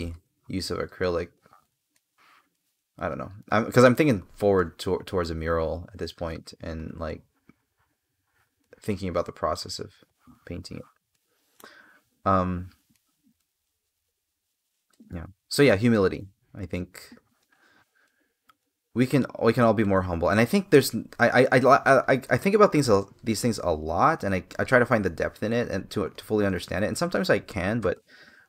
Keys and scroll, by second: 1.6 space, 12.6 space, 27.2 space.